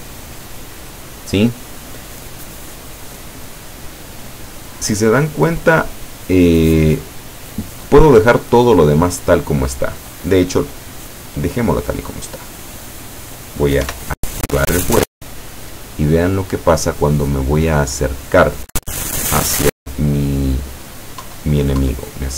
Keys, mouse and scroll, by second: 0.4-1.8 drag, 8.4-10.1 drag, 10.7-12.1 drag, 13.9 p, 21.3 Down.